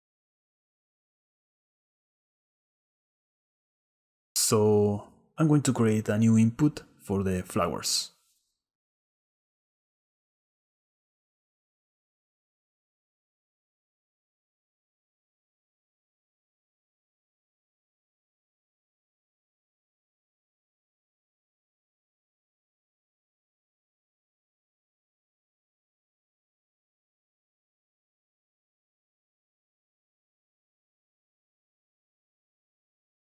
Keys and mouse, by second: 1.3-2.9 right drag, 4.7 right click, 5.7-7.3 drag, 10.0-11.9 drag, 11.9 BackSpace, 12.0 BackSpace, 16.7-21.5 drag, 25.1-26.1 drag, 27.2-28.7 drag, 29.7-32.2 drag.